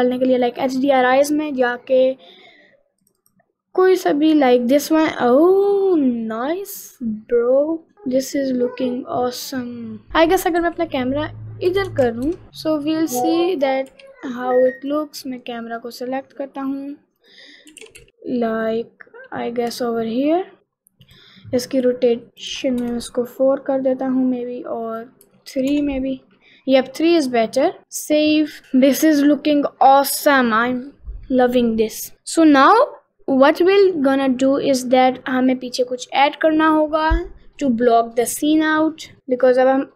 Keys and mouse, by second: 9.7 middle click, 13.6 click, 13.9 r, 14.8 click, 15.6 click, 17.2 click, 17.8 r, 21.1 click, 22.3 click, 24.9-25.9 drag, 27.2 click, 27.8 ctrl+s.